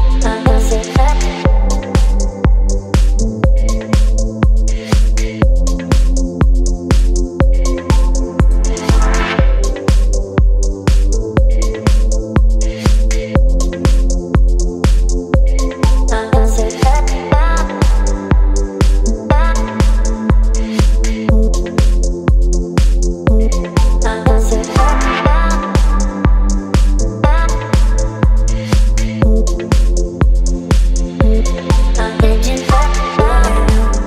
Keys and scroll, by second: 3.5 space, 4.9 v, 14.8 space, 32.4 KP_4.